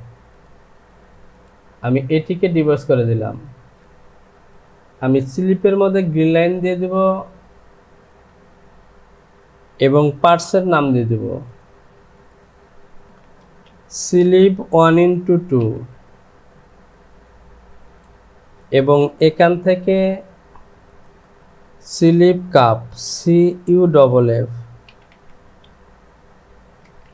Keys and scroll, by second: 3.8 j, 5.6 Home, 8.8 Return, 13.0 v, 13.4 space, 14.5 KP_1, 14.9 x, 17.2 Return, 19.4 e, 23.6 u, 24.9 f, 26.8 space.